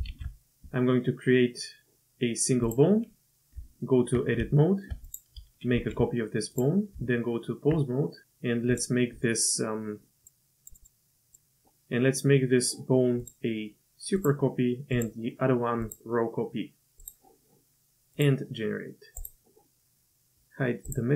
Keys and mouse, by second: 0.1 shift+a, 3.5 Tab, 4.6-4.9 shift+drag, 5.1 click, 5.8 shift+d, 6.9 Tab, 10.2 click, 10.8-11.3 drag, 13.2-14.3 drag, 15.0 click, 15.9-17.1 drag, 20.9 click.